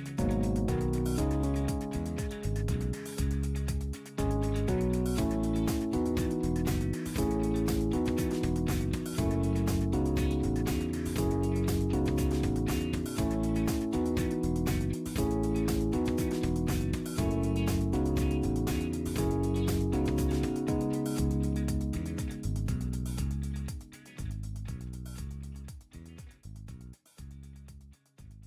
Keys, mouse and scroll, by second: 0.2 click, 2.1 click, 4.9 click, 6.2-7.8 middle drag, 6.4-7.8 drag, 8.6-10.6 middle drag, 8.8-10.6 drag, 11.0 scroll down 2, 11.7-13.8 middle drag, 12.0-13.8 drag, 14.8-16.6 middle drag, 20.6 click, 22.1 click, 23.7-24.9 middle drag, 23.9-26.2 drag, 25.6 middle click.